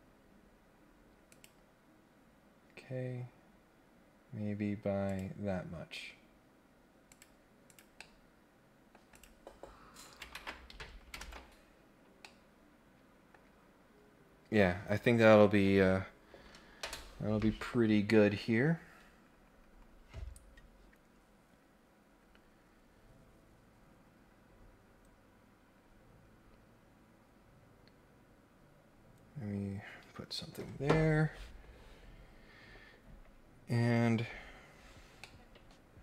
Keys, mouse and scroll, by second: 0.3-1.2 scroll up 1, 1.3 click, 3.3-4.5 scroll up 3, 5.0 click, 7.0 click, 7.7 click, 7.9 middle click, 9.1 click, 11.2 ctrl+Tab, 12.2-13.3 middle drag, 35.2 middle click.